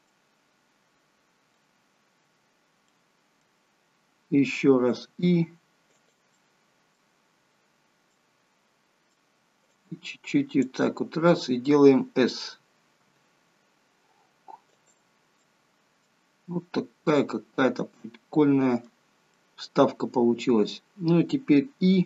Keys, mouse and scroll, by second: 0.0 middle click, 1.7-2.5 scroll down 1, 2.5 scroll down 1, 2.8 middle click, 3.7 scroll up 3, 4.9 i, 6.2 middle click, 7.2-7.9 scroll down 2, 8.1 middle click, 9.7 click, 13.0 s, 15.3 scroll down 1, 15.4 middle click, 16.4 middle click, 19.3 middle click, 20.6 scroll up 3.